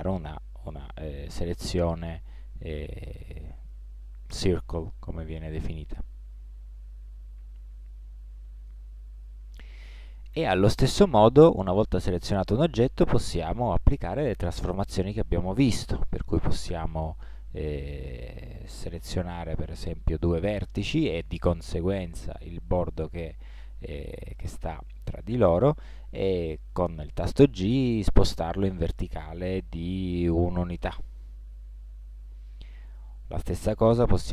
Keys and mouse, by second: 7.2-9.1 middle drag, 11.2-13.7 middle drag, 18.3-19.9 drag, 19.9-22.0 middle drag, 25.7-26.8 middle drag, 27.0 g, 31.4-34.1 middle drag.